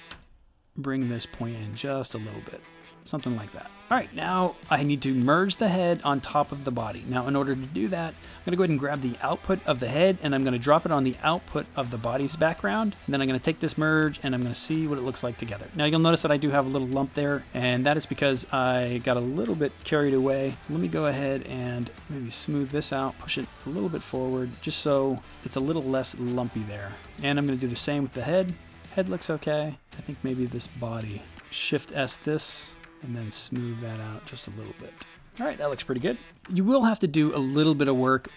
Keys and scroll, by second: 31.8 shift+s.